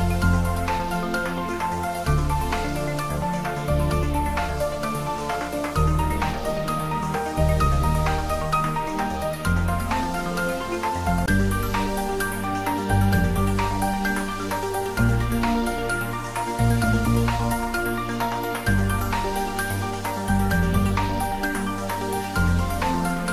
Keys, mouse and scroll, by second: 1.6-2.8 scroll up 1, 2.8 click, 8.3 click, 11.3 click, 16.3 click, 22.8 click.